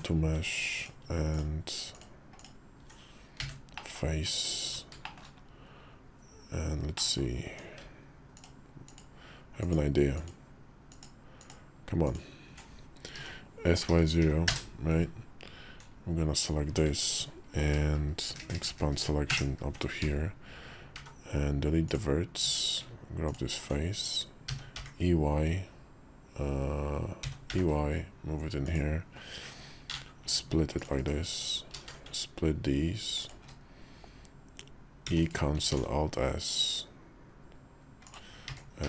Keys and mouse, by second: 2.1 alt+click, 3.2 f, 3.5 middle click, 3.9 Tab, 4.4 Tab, 4.8 shift+middle click, 6.7 middle click, 7.2 Tab, 8.7 alt+click, 11.8 alt+click, 12.9 s, 18.1-18.7 ctrl+KP_Add, 19.1 ctrl+KP_Add, 19.8 x, 20.7 x, 22.6 Tab, 23.0 alt+click, 24.3 d, 24.5 y, 27.0 e, 29.7 ctrl+r, 31.5 ctrl+b, 34.8 e, 35.5 alt+s, 38.3 s.